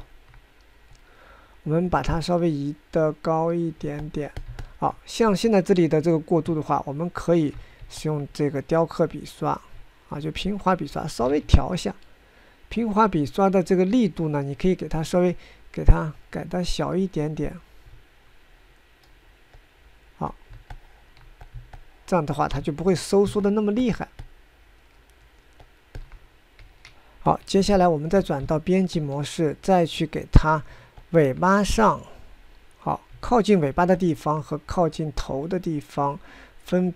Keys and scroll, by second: 7.2 ctrl+Tab, 7.7 ctrl+Tab, 7.7 ctrl+Tab, 7.9 ctrl+Tab, 8.0 ctrl+Tab, 12.0 ctrl+z, 23.4 ctrl+z, 28.1 9, 28.5 ctrl+Tab.